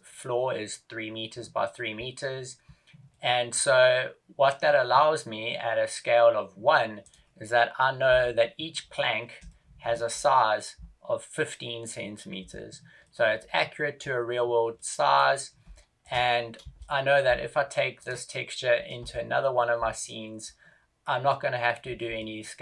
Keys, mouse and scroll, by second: 2.2 scroll up 4, 3.0 middle click, 7.1 right click, 8.1 KP_7, 8.7-9.4 scroll up 2, 9.4 shift+middle click, 9.4 scroll up 3, 10.2 scroll up 1, 13.1 middle click, 14.9 middle click, 15.6 shift+middle click, 16.5 shift+KP_0, 17.9 right click, 18.9 shift+KP_0, 19.9 middle click, 22.1 shift+middle click.